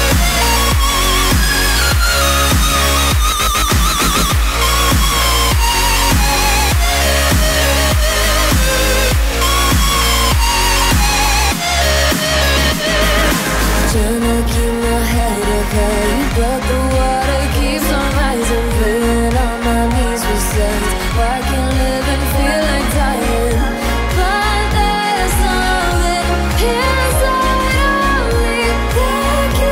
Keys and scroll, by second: 20.8 z, 23.8 space.